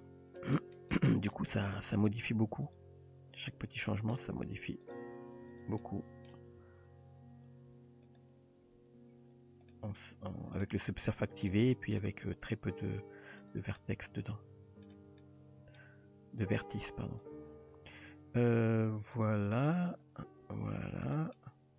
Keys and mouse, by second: 0.1-0.4 middle drag, 0.6 shift+middle drag, 1.0-1.3 middle drag, 1.6 g, 2.6 click, 3.4 click, 3.9 middle click, 4.4 g, 5.8-6.3 middle drag, 6.6 g, 8.7 Tab, 9.7-10.7 middle drag, 11.5-12.0 middle drag, 12.2 Tab, 13.4 drag, 13.8-14.9 middle drag, 15.2-15.8 middle drag, 16.0 g, 18.1 click, 18.8 s, 19.7 click, 20.5 s, 21.4 middle click.